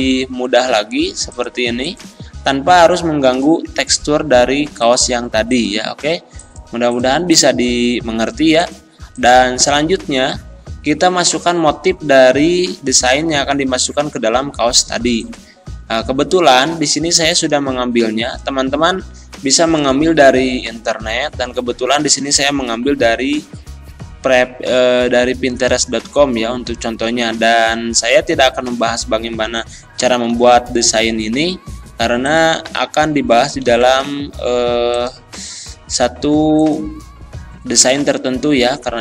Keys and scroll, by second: 30.3 ctrl+c, 32.7 ctrl+c, 33.6 ctrl+v, 37.8 ctrl+v.